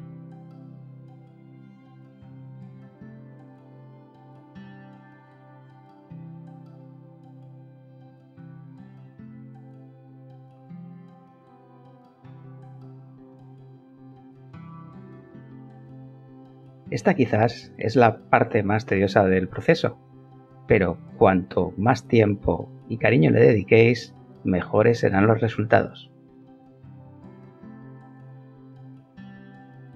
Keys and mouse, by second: 0.9 click, 1.5 middle click, 3.1 Tab, 8.4 click, 10.7 shift+b, 11.2 Return, 15.3 Tab, 16.9 click, 17.8 shift+click, 19.2 g, 21.5 click, 22.5 click, 22.7 g, 23.4 middle click, 23.7 middle click, 24.9 click, 25.5 click, 25.7 g, 27.0 Escape, 27.5 click, 28.4 g.